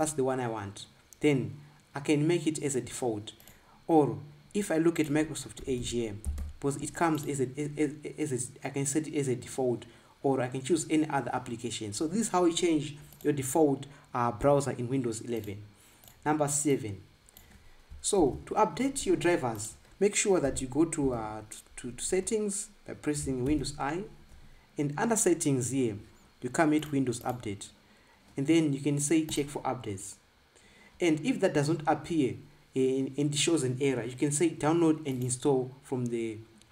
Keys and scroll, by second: 5.8-7.2 typing, 19.0 ctrl+b, 21.4 BackSpace, 22.3 Escape, 24.3 super+i.